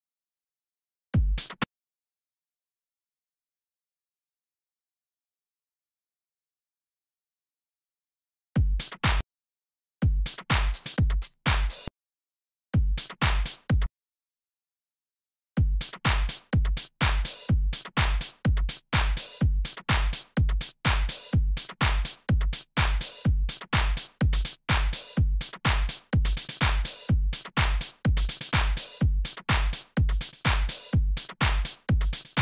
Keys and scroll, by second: 1.1 s, 1.6 space, 3.1 z, 5.0 z, 5.7 super+z, 5.8 super+Left, 6.0 super+Up, 8.5 alt+s, 9.2 space, 9.7 alt+space, 10.0 alt+s, 10.4 alt+Left, 12.7 s, 14.2 d, 15.5 s, 18.9 z, 19.6 super+z, 19.7 super+Left, 20.0 super+Up, 27.2 super+Down.